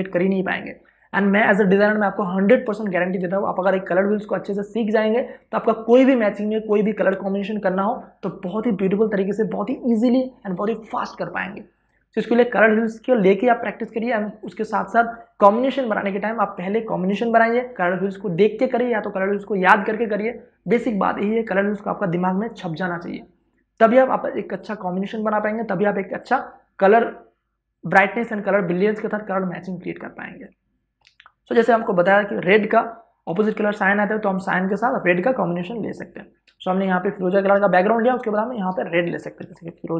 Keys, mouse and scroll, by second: 35.3 click, 36.3 space, 36.4 ctrl+click, 37.4 v, 37.9 space, 38.1 ctrl+click, 39.1 w, 39.3 click, 39.9 i.